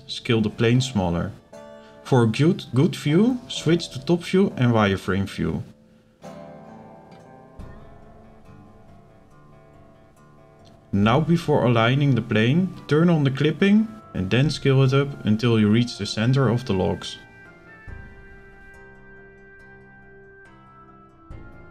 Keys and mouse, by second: 0.6 s, 2.6 click, 4.1 s, 6.1 click, 7.1-8.2 drag, 8.8 click, 9.8 z, 12.5 click, 13.4 click, 14.4 click, 16.2 s.